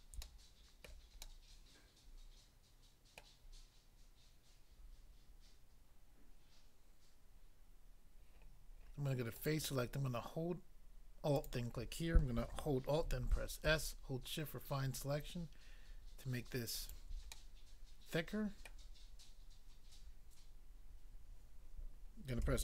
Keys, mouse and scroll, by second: 0.2 shift+middle click, 0.9 shift+middle click, 1.2 shift+middle click, 3.2 middle click, 9.4 click, 11.3 alt+click, 13.0 alt+s, 16.7 shift+click, 17.3 middle click, 18.6 middle click, 22.4 a.